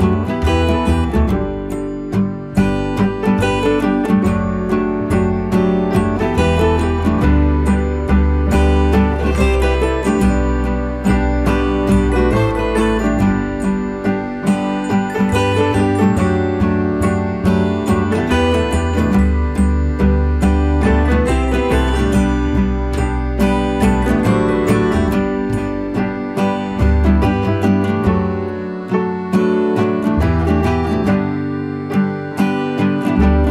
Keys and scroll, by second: 11.4 ctrl+t, 21.8 Return.